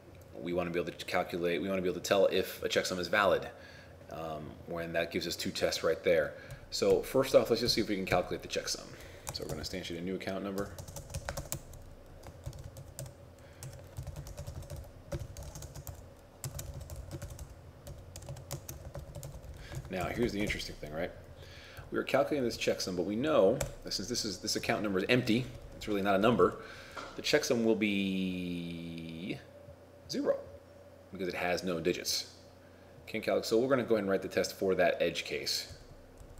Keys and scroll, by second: 9.4 shift+a, 11.6-13.0 typing, 16.6 shift+c, 18.6 shift+a, 19.8 shift+9.